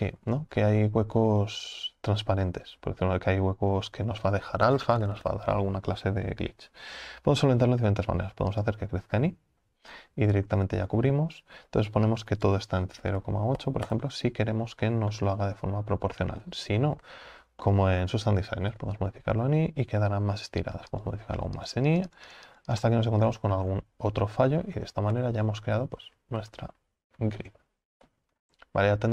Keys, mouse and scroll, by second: 0.3-0.8 scroll up 4, 8.7 click, 9.9 scroll down 5, 10.4-11.0 scroll up 2, 13.9-15.1 drag, 15.1-17.1 middle drag, 17.1 ctrl+z, 17.6-18.8 middle drag, 18.8 KP_7, 21.1-23.3 drag, 23.3 scroll down 5, 23.7-25.1 scroll up 6, 25.1 ctrl+z, 25.7 ctrl+z, 26.4 ctrl+z, 26.8 ctrl+z, 28.0 ctrl+z, 28.4-28.9 scroll down 4, 28.9-29.1 middle drag.